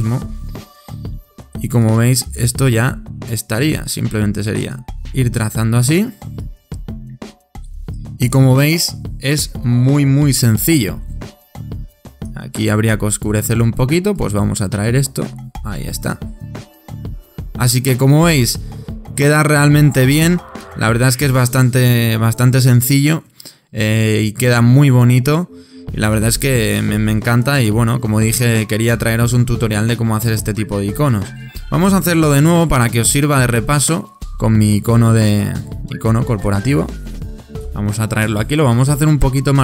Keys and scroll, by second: 24.3 super+-.